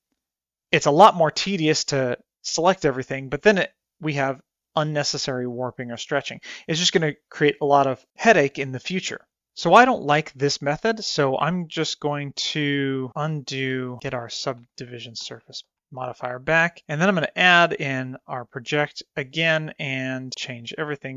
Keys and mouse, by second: 13.8 ctrl+z, 14.2 ctrl+z, 14.5 ctrl+z, 14.8 ctrl+z, 15.1 ctrl+z, 15.5 ctrl+z, 16.9 click, 17.7 click, 18.1 click, 18.7 click, 19.2-20.7 drag, 20.8 click.